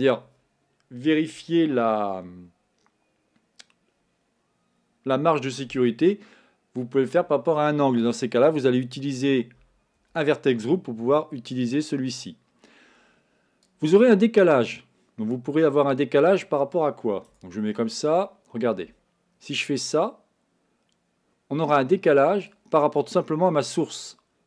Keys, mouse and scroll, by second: 8.2-17.4 drag, 17.4 Tab, 19.6-23.3 drag, 23.3-24.4 middle drag.